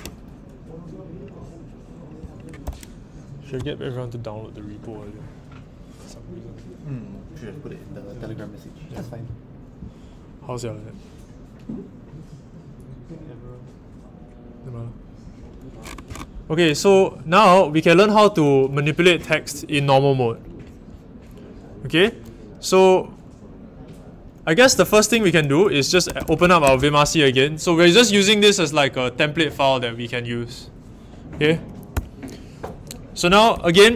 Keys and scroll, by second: 24.3-27.1 typing, 31.9 Return, 33.3-33.9 typing.